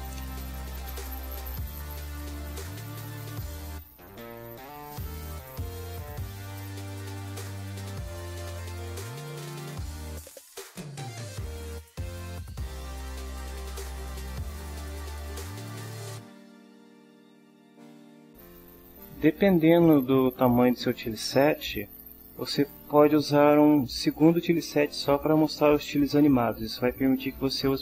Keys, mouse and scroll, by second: 1.1 click, 1.9 click, 2.7 click, 3.8 click, 5.0 click, 5.8 click, 6.7 click, 7.5 click, 8.0 click, 8.4 click, 8.8 click, 9.3 click, 9.9 click, 10.3 click, 10.8 click, 11.2 click, 11.6 click, 12.2 click, 12.6 click, 13.1 click, 13.7 click, 14.1 click, 14.5 click, 15.2 click, 15.8 click, 16.2 click, 16.7 click.